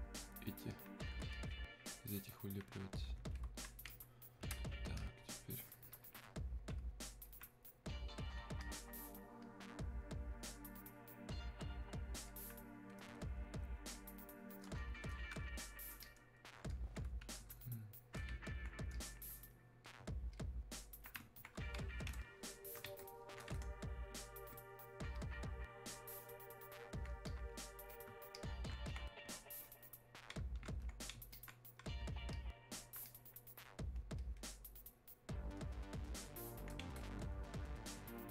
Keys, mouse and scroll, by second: 7.3-8.6 alt+drag, 12.3-20.3 alt+drag, 25.2-34.2 ctrl+shift+drag.